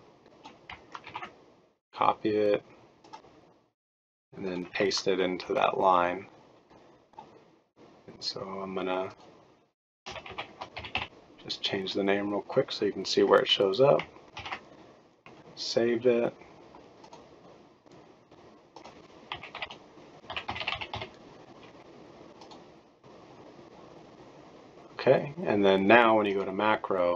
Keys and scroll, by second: 1.0 ctrl+c, 5.4 ctrl+v, 10.0-11.4 typing, 14.3 ctrl+s, 19.9-23.1 typing.